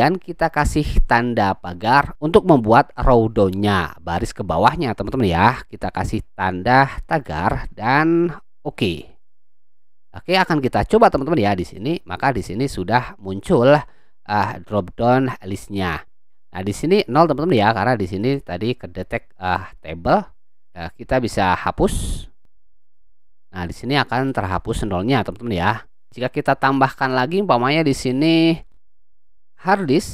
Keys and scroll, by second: 7.1 shift+3, 29.2-30.1 typing.